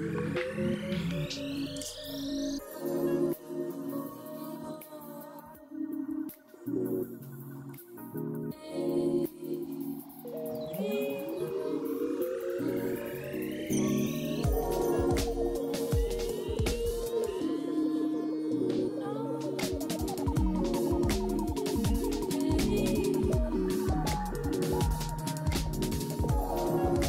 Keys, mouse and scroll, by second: 0.0 0, 0.1 0, 0.2 Return, 1.2-2.0 typing, 8.0-8.9 typing, 10.3-13.2 typing, 14.6-15.7 typing, 18.3 scroll up 2, 18.8-19.1 scroll down 3, 22.6 middle click, 23.0 scroll down 2, 23.2 middle click, 24.1 double click, 24.1 double click, 25.5 double click, 26.0-26.9 typing.